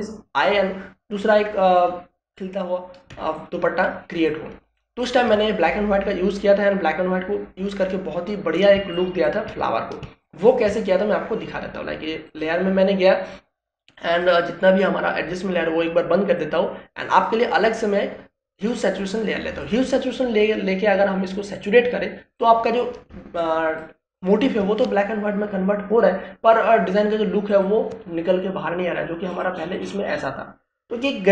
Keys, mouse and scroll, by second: 4.0 space, 4.3-5.7 ctrl+drag, 9.7 space, 9.9 ctrl+click, 11.0 space, 11.2 ctrl+click, 11.5 ctrl+space, 13.2-24.1 drag, 24.1 ctrl+space, 24.4 ctrl+click, 24.6 ctrl+space, 25.5 space, 28.5 click.